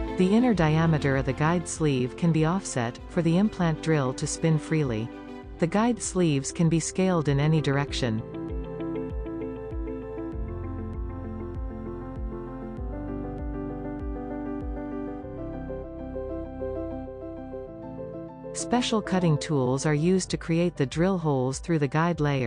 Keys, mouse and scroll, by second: 1.9 click, 2.0 scroll up 3, 2.7 shift+middle click, 3.1-3.5 shift+scroll down 1, 3.5-6.5 drag, 8.0 click, 12.2 s, 13.3 scroll down 3, 13.4 s, 14.7 s, 18.1 click, 18.2 middle drag, 18.4 s, 21.8 scroll, 21.9-22.4 scroll down 1.